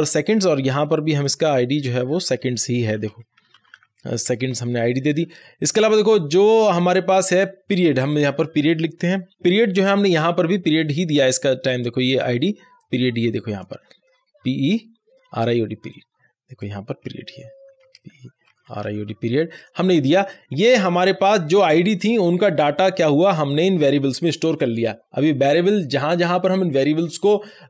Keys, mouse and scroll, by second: 1.1 scroll up 1, 1.2-2.8 drag, 2.8-5.0 typing, 6.7-8.9 drag, 8.9 p, 9.4 Return, 9.8 scroll up 1, 12.7 click, 13.7 scroll down 1, 15.8-17.4 drag, 17.4-19.5 typing, 20.0 click, 22.9-24.2 drag.